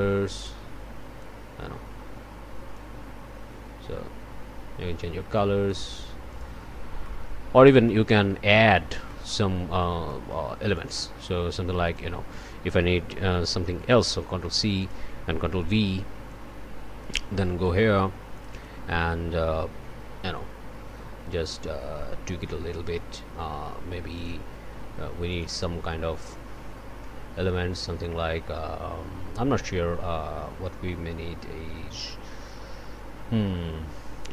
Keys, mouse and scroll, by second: 0.3-1.4 drag, 2.7-5.9 drag, 6.3 click, 7.0 click, 7.5 scroll up 1, 8.7 scroll up 1, 9.1 click, 9.8 scroll down 1, 10.1 click, 10.7 click, 11.5 click, 12.3 click, 14.4 ctrl+c, 14.8 ctrl+click, 15.5 ctrl+v, 16.3 ctrl+click, 17.6 click, 18.3 click, 24.1 click, 25.3 click.